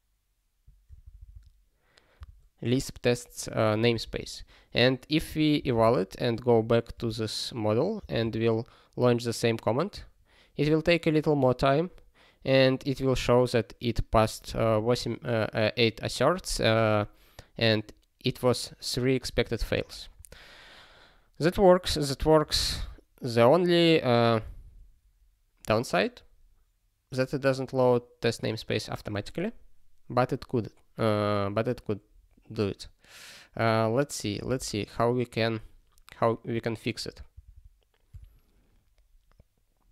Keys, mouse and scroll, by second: 4.2 ctrl+k, 5.6 super+b, 22.1 click, 34.4 super+b, 39.1 scroll up 1.